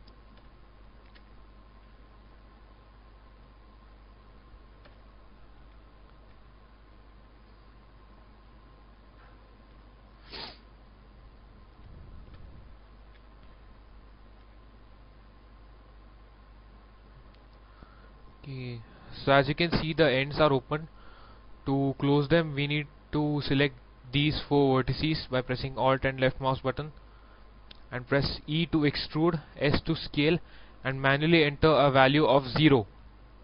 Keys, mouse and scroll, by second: 0.3 alt+KP_1, 1.1 alt+KP_1, 1.1 alt+e, 1.5 click, 3.0 middle click, 3.8 alt+right click, 4.8 alt+KP_1, 5.7 alt+e, 7.4 click, 9.8 shift+middle click, 10.5 middle click, 10.5-11.0 scroll down 2, 11.3 alt+right click, 12.3 alt+KP_1, 13.1 alt+e, 14.4 e, 14.7 click, 17.2 middle click, 18.1-22.1 shift+middle drag, 22.2 shift+middle click, 23.1 scroll up 1, 25.7 alt+right click, 26.9 alt+right click, 28.5 alt+e, 29.0 click, 29.5 s.